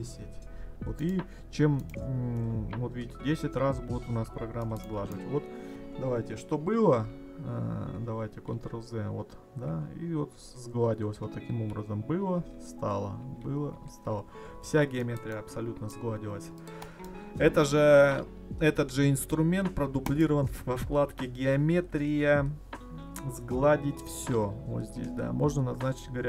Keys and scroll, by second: 7.0 ctrl+y, 8.5 ctrl+z, 10.3 ctrl+y, 11.5 ctrl+z, 12.4 ctrl+y, 13.2 ctrl+z, 13.7 ctrl+y.